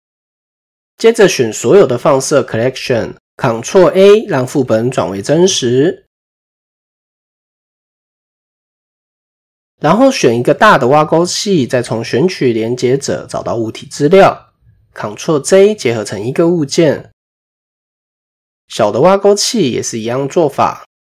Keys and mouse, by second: 0.2 click, 1.4 shift+click, 2.8 ctrl+s, 2.8 ctrl+a, 11.3-13.1 drag, 14.9 ctrl+j, 17.4 click, 18.7-21.1 drag.